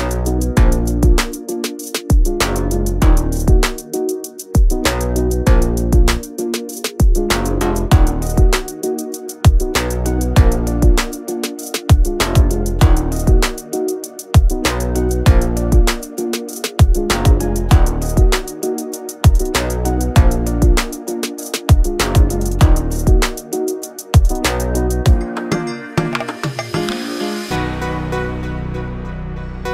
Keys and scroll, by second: 5.9 space, 8.3 m, 10.2-13.0 typing, 13.2 Return, 16.0 space, 18.0 Delete, 22.2 q, 28.1 m.